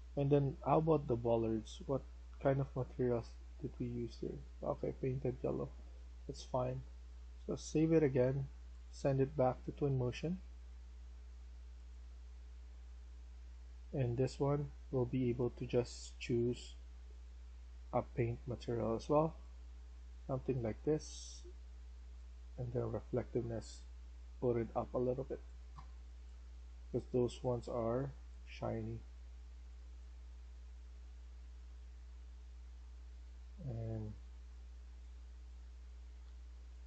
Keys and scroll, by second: 5.1 Escape, 13.9-15.8 typing, 25.0-26.3 typing, 29.4-36.1 typing.